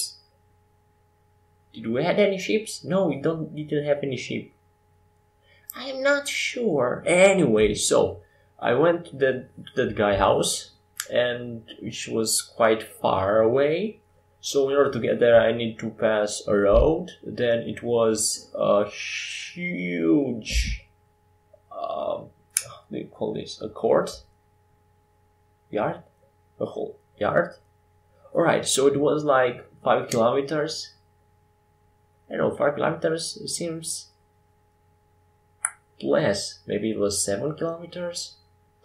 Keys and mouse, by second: 0.6-6.4 drag, 7.1-9.1 drag, 8.8 right click, 10.1 click, 10.1 right click, 10.6 click, 10.6 right click, 14.4-15.5 middle drag, 16.7-21.4 drag, 21.4-24.3 right drag, 22.4-24.3 drag, 26.2-31.5 drag, 32.4-35.7 right drag, 33.1 x, 35.7 KP_5, 35.8 KP_7.